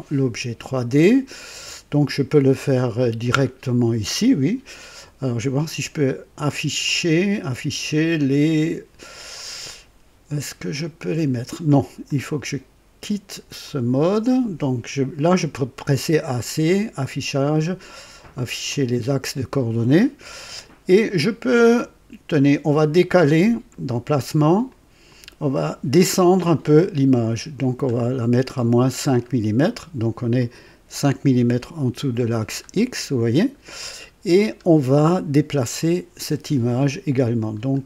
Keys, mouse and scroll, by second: 6.8 click, 12.0 click, 13.6 click, 16.9 click, 18.7 click, 21.6 click, 24.6 click, 25.1 click, 27.2-27.8 scroll down 1, 28.6-29.0 scroll down 4, 30.3-32.7 drag, 33.3 click, 34.3 scroll up 2, 37.5 scroll up 1.